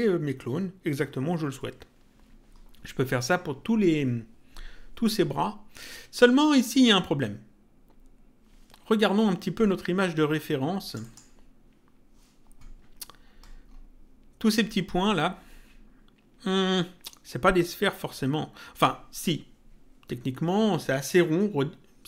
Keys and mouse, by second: 10.8 click.